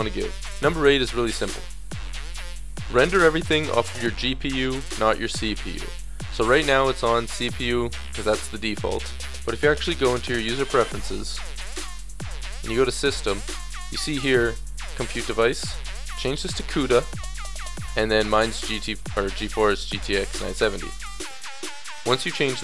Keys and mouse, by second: 1.7-5.8 middle drag, 5.9-11.2 drag.